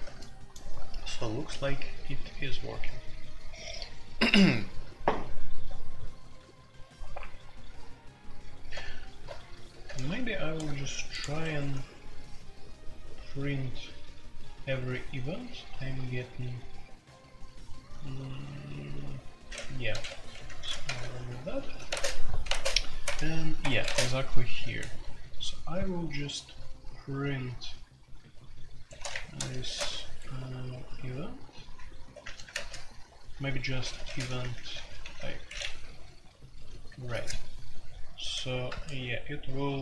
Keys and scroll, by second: 11.4 Escape, 19.9 typing, 20.3 Escape, 20.4 F2, 20.8 ctrl+c, 21.0 ctrl+c, 21.9 space, 22.5 space, 22.9 Tab, 23.0 Tab, 23.6 Escape, 23.6 Escape, 23.8-25.8 typing, 24.1 Tab, 28.9-29.8 typing, 29.1 Return, 29.8 Escape, 31.3-32.5 typing, 33.8-35.1 typing, 35.4 Escape, 36.4-38.7 typing.